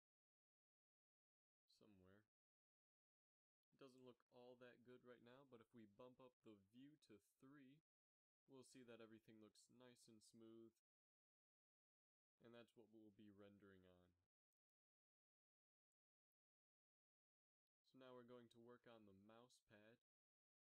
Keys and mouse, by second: 4.4 middle click, 5.2 Tab, 8.7-10.2 middle drag, 14.0 click, 16.6 KP_7, 17.0 z, 18.5 Tab, 19.7 z, 20.3 z.